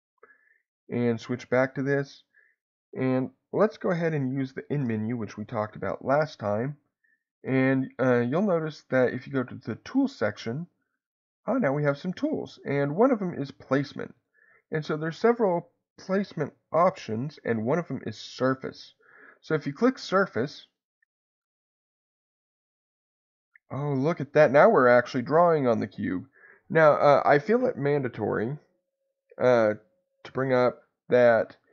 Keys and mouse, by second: 0.9-2.5 drag, 9.9 click, 14.1-19.8 drag, 20.7-23.1 drag, 23.3-25.2 middle drag, 30.6-31.7 drag.